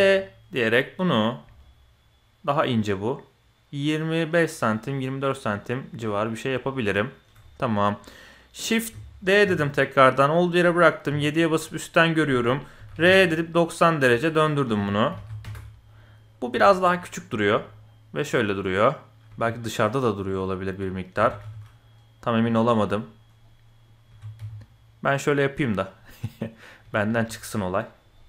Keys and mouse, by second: 7.4-8.0 drag, 9.4 shift+d, 11.0 KP_7, 11.8 click, 12.7 r, 12.9 KP_9, 12.9 KP_0, 14.7 r, 16.5 s, 17.3 g, 19.3 g, 21.1 s, 22.4 middle click, 23.4 middle click, 24.1 g, 26.0 click, 26.8 g, 28.1 click.